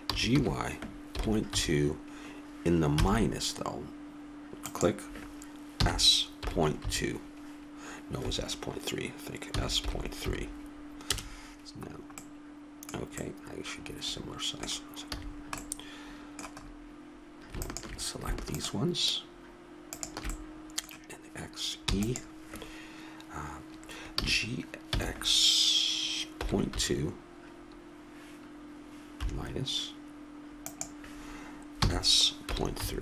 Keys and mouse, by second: 0.4 g, 6.0 s, 9.8 s, 12.7-14.7 middle drag, 15.4 a, 17.9-20.6 drag, 20.6-22.0 middle drag, 22.2 e, 24.5 g, 32.1 s.